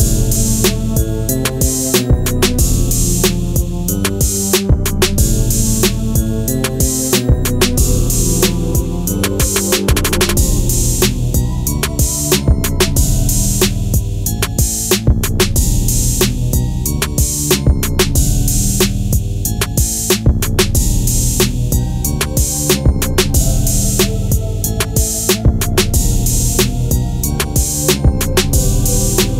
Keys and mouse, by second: 1.9 click, 2.2 middle click, 6.1 middle click, 7.4 ctrl+r, 10.2 middle click, 11.5 ctrl+b, 15.7 click, 16.6 click, 17.8-18.3 right drag, 19.9 drag, 20.5 click, 21.2 click, 21.8 KP_1, 23.5 g, 25.6 click, 26.3 s, 27.2 click, 27.9 g, 28.6 click, 29.2 r.